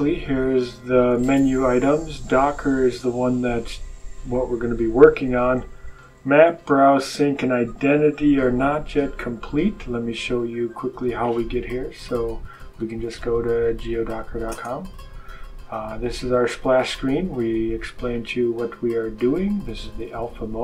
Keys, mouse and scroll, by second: 10.2 click, 12.1-14.7 typing, 16.2-16.6 scroll down 1, 18.0-19.8 drag.